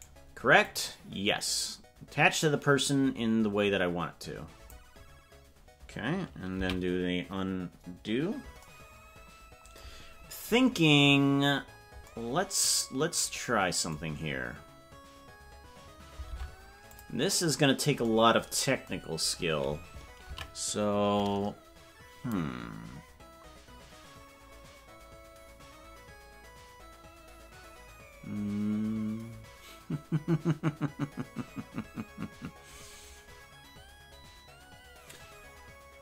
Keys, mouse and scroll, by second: 0.1 right click, 0.6-4.8 drag, 7.6 ctrl+z, 10.6 scroll down 1, 12.1 scroll down 5, 16.4 ctrl+Tab, 16.9 click, 23.0 ctrl+s.